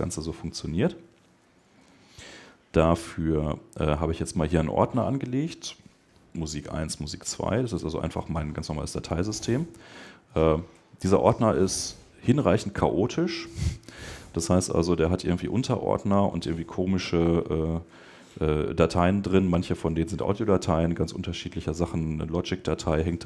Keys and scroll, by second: 10.6 Right, 14.6 Down, 15.4 Up, 16.2 Right, 16.9 Up, 17.4 Down, 17.8 Right, 21.1 Down, 21.6 Up.